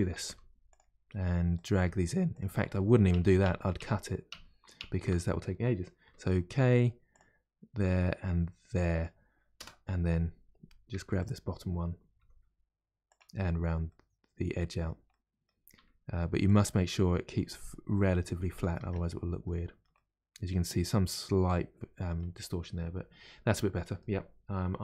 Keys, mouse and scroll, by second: 0.1 g, 1.5 click, 1.7 g, 2.8 ctrl+z, 3.1 ctrl+z, 6.0 k, 10.9 1, 11.2 click, 12.2 g, 13.5-13.8 scroll down 1, 13.8-15.7 middle drag, 15.7 g, 16.7-18.8 middle drag, 18.8 Tab, 19.0 scroll down 2, 19.9-22.2 middle drag, 22.2 scroll up 1, 22.4-22.9 scroll down 2, 23.2-24.8 middle drag.